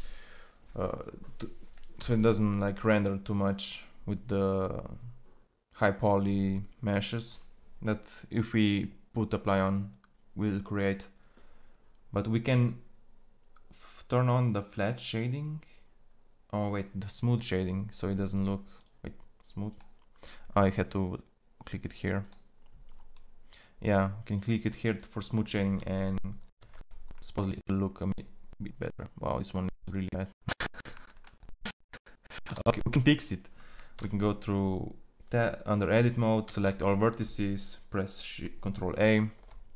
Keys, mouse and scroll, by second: 17.3 click, 18.1-19.5 middle drag, 21.6 click, 22.6 click, 26.0 shift+z, 33.1 shift+z, 33.9 Tab, 36.4 a, 39.3 a.